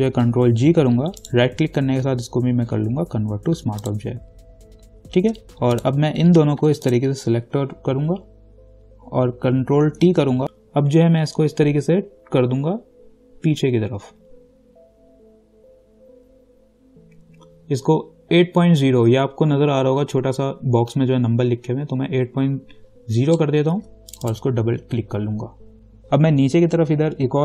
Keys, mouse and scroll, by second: 0.5 ctrl+g, 1.4 right click, 4.0 click, 7.1 ctrl+click, 10.2 ctrl+t, 10.4 ctrl+alt+shift+click, 24.3 click.